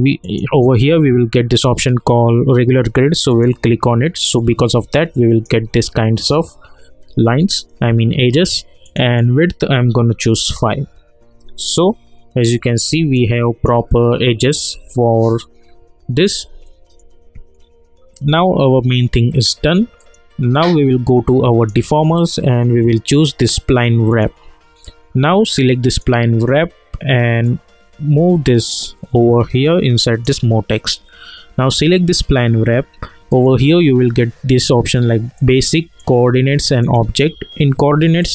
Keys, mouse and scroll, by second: 0.2 click, 3.3 click, 4.3 scroll down 1, 4.9-8.1 alt+drag, 8.8 click, 10.3 Return, 11.4 scroll up 1, 11.5-11.8 scroll down 1, 11.8-12.9 scroll up 1, 12.9 scroll down 1, 13.1 alt+click, 14.0 scroll up 1, 14.9-16.6 alt+drag, 16.6 alt+middle click, 17.1 scroll down 1, 18.4-31.6 alt+drag.